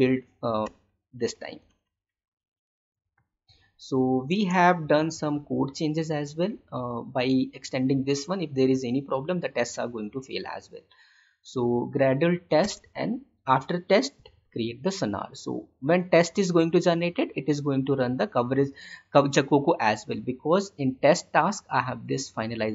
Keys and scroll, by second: 4.2 space, 12.5 space.